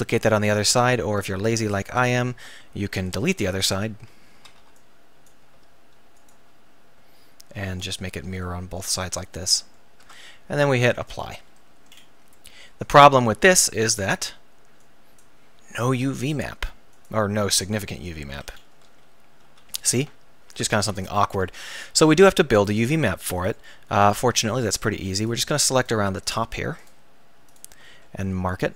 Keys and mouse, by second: 1.1 ctrl+r, 1.9-3.1 drag, 3.1 right click, 3.7 a, 4.4 z, 4.6 b, 5.6 x, 7.0 z, 8.5 middle click, 10.0 Tab, 13.4 Tab, 19.4 a, 19.5 a, 19.8 a.